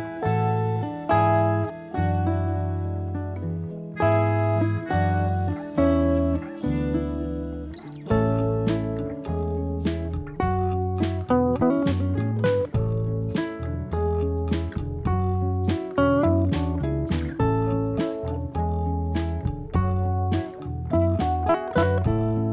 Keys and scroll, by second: 0.3 ctrl+-, 3.1 ctrl+j, 7.5 ctrl+-, 8.2 ctrl+=, 15.5 ctrl+-.